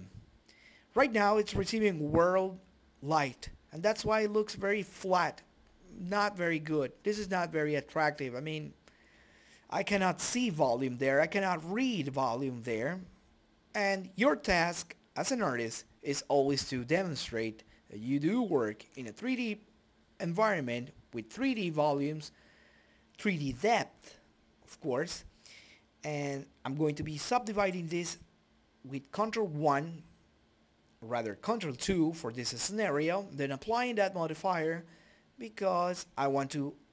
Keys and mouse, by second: 0.0 right click, 0.6 shift+z, 2.6 click, 3.5 Delete, 4.5 right click, 5.9-7.7 drag, 8.4 shift+F3, 9.6 click, 10.7-12.4 drag, 11.5 Delete, 11.8 shift+a, 14.6-15.9 drag, 16.2 click, 16.4 middle click, 17.4 click, 18.8 click, 20.4 shift+z, 20.7 click, 21.1-22.3 right drag, 21.9 ctrl+2, 22.6 right click, 23.3 ctrl+1, 26.0-27.5 drag, 27.6 ctrl+3, 29.0 click, 29.4 right click, 30.2 click, 33.6 click, 35.3 shift+z.